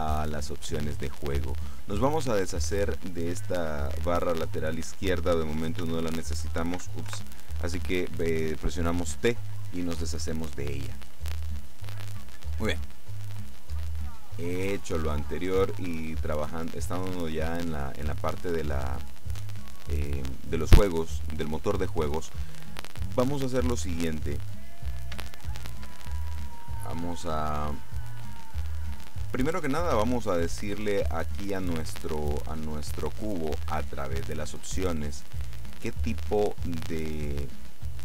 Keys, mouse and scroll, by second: 5.9 n, 6.9 n, 7.2 t, 13.1-15.3 middle drag, 15.3-15.7 scroll down 1, 15.7 middle click, 16.8 middle click, 17.7 middle click, 23.9-24.7 scroll up 2, 25.3-26.4 shift+middle drag, 27.3 middle click, 33.6-34.9 middle drag, 35.0-35.6 scroll down 1, 37.1-38.0 scroll up 1.